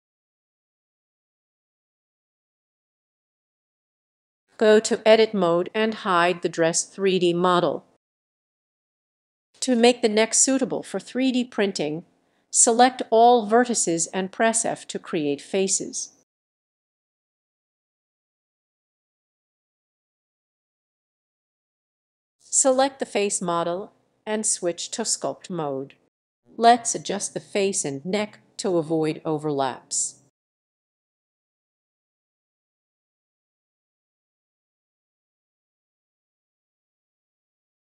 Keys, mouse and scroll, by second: 0.2 click, 0.6-1.0 scroll down 2, 1.0 click, 1.7-2.1 scroll up 4, 2.6 x, 3.2 ctrl+click, 3.4 scroll, 3.8 scroll down 4, 4.7 click, 5.4 click, 8.1 click, 11.5 click, 11.7-12.6 typing, 16.9 click, 19.0 click, 21.0 click, 21.7 click, 23.5 click, 27.3 middle click, 28.6 ctrl+click, 30.4 ctrl+click, 30.8 ctrl+click, 31.4 click, 31.7 click, 33.4 click, 34.0 ctrl+click, 35.5 ctrl+click, 35.6 ctrl+click.